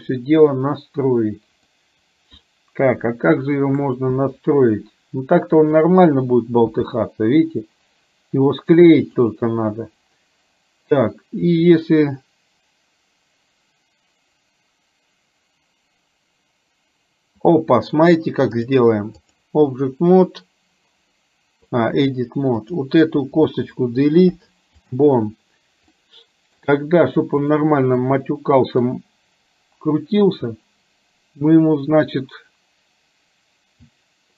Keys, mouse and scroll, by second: 4.2 KP_1, 5.8 click, 6.8 r, 18.7 click, 22.6 click, 24.3 Delete, 26.0 middle click, 27.5 click, 28.1 middle click.